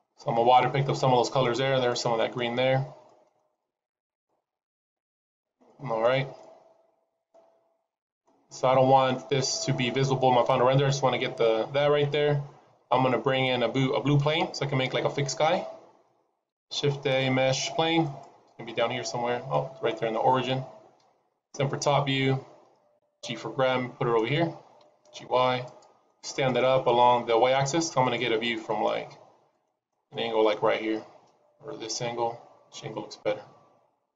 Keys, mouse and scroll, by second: 0.8 middle click, 1.8 middle click, 3.0 middle click, 3.6 middle click, 4.2 middle click, 5.6-6.0 shift+middle click, 6.3 middle click, 12.0-13.8 scroll down 2, 16.4 shift+a, 19.4 middle click, 21.4 KP_7, 22.1-22.9 scroll down 4, 22.9 g, 26.3 middle click, 27.7 scroll up 1, 27.9 middle click, 28.9 scroll up 3, 29.5 middle click, 30.0-30.4 scroll up 2, 30.4 middle click.